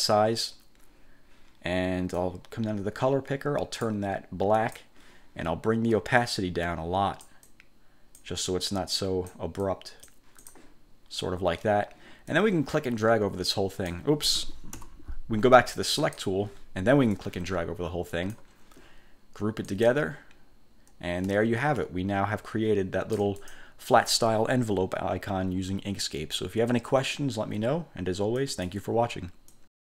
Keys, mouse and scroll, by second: 2.3-4.2 drag, 4.7 click, 6.4-8.5 drag, 8.8 click, 9.8 click, 10.6 click, 12.4-14.2 drag, 15.0 Delete, 16.1 click, 17.2-18.7 drag, 19.8 click, 21.9-23.8 ctrl+shift+drag, 28.5 click, 29.6 click.